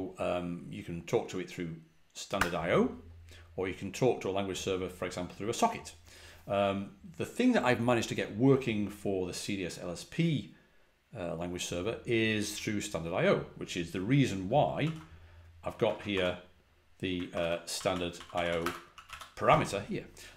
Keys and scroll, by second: 14.7 shift+g, 15.7 shift+4, 16.0 b, 17.2 ctrl+v, 17.4-19.5 typing.